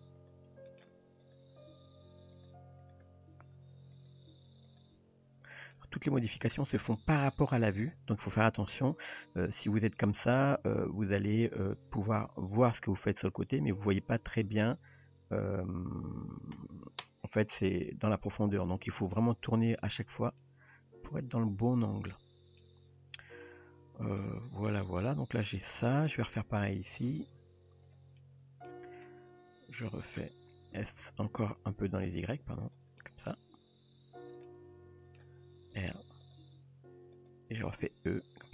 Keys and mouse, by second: 0.2 drag, 0.7 middle click, 1.2 drag, 1.7 g, 2.8 click, 3.4 g, 4.3 g, 4.9 r, 5.7 middle click, 7.0 shift+middle click, 9.1-10.0 middle drag, 11.3 drag, 12.3 g, 13.8 click, 14.2 g, 19.1-19.7 middle drag, 20.4-22.6 middle drag, 23.2-24.2 middle drag, 25.1-25.6 middle drag, 25.9 shift+middle click, 27.2 click, 27.9 click, 28.2-28.7 middle drag, 29.1-30.2 middle drag, 30.7 s, 33.0 middle click, 33.5 g, 34.5-35.2 middle drag, 35.8 r, 36.4 g, 37.9 e.